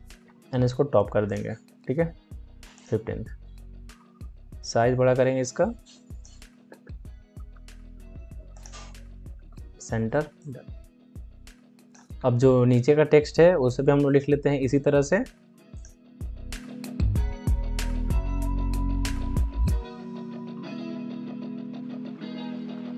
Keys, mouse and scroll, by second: 3.7 click, 5.3 click, 6.5 Return, 7.2 a, 8.4 click, 9.2 ctrl+d, 10.3-12.1 drag, 12.1 alt+scroll up 1, 15.6 alt+scroll, 15.8 click, 17.1 ctrl+c, 17.2 click, 17.8-18.9 typing, 18.8 click, 19.9 ctrl+v, 20.2 click, 20.4 ctrl+a, 20.7 click.